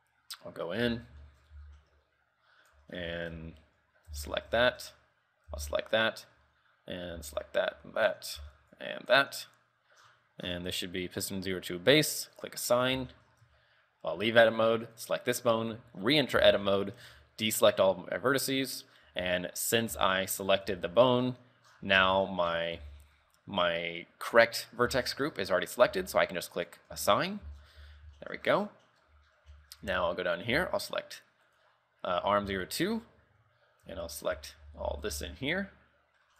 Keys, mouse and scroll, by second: 1.0-4.3 typing, 1.4 shift+middle click, 1.8 scroll up 5, 4.5 scroll down 5, 4.8 shift+middle click, 5.7 l, 6.0 shift+middle click, 7.3 l, 7.9 l, 8.5 b, 10.1-12.3 scroll down 13, 12.5 click, 12.9 scroll down 4, 13.2 shift+middle click, 13.8 Tab, 15.4 right click, 16.0 Tab, 16.1 scroll up 5, 16.6 shift+middle click, 16.9 scroll up 2, 17.2 a, 18.1 scroll up 2, 19.2 l, 20.8 l, 21.4-22.0 scroll down 8, 22.2 shift+middle click, 22.6 scroll down 2, 23.0 b, 24.7 scroll up 5, 25.2 shift+middle click, 25.5-26.4 scroll up 1, 26.4 scroll up 1, 26.7 click, 27.2 Tab, 27.3-27.9 scroll down 6, 27.6 z, 27.9 z, 28.3 shift+middle click, 28.7 scroll down 2, 28.8 middle click, 29.2 KP_3, 29.4-29.7 scroll down 3, 29.7 shift+middle click, 30.0 z, 30.2 scroll up 2, 30.7 z, 31.2 right click, 31.9 right click, 32.5 Tab, 32.7 shift+middle click, 33.0-33.3 scroll up 4, 33.3-35.5 typing.